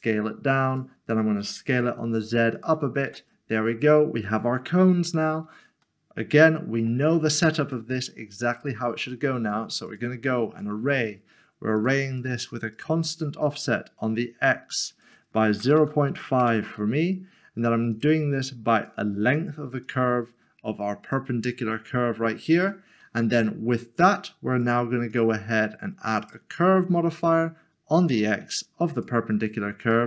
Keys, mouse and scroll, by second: 1.7 typing, 3.1 Tab, 5.8 middle click, 7.6 click, 12.2 click, 12.7 double click, 13.1 click, 14.9 double click, 15.6-16.1 typing, 16.4 Return, 17.9 click, 24.6 click.